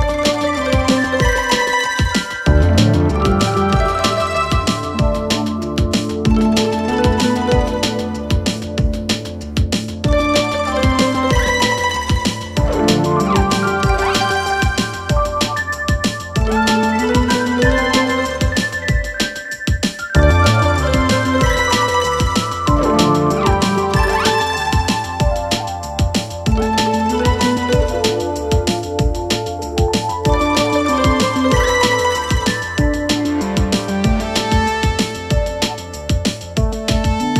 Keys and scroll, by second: 0.3 ctrl+z, 5.1 ctrl+c, 7.3 ctrl+v.